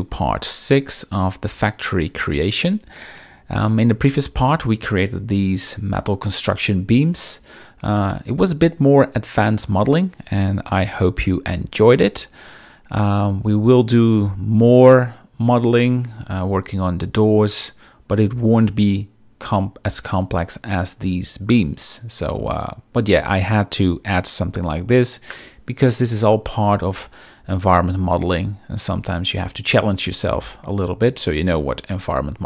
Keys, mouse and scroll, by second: 3.6 click.